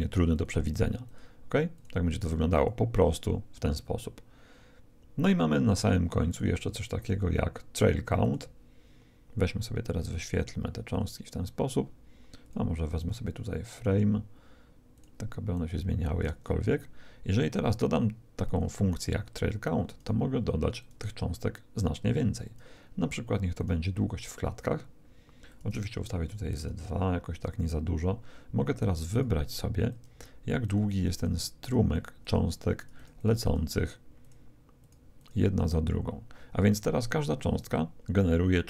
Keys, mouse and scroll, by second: 6.3-9.4 drag, 10.1-17.4 drag, 17.2-19.8 middle drag, 19.8-25.3 drag, 25.5-27.2 drag, 29.1-37.0 drag.